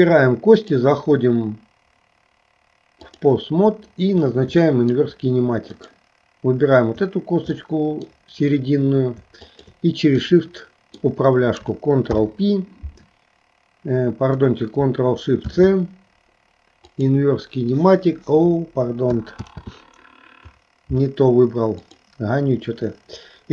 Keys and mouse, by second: 0.5-3.4 drag, 4.8 shift+middle click, 5.9 click, 7.7 middle click, 9.5 shift+click, 10.4 middle click, 12.1 ctrl+p, 15.5 ctrl+shift+c, 19.6 ctrl+z, 21.8 click.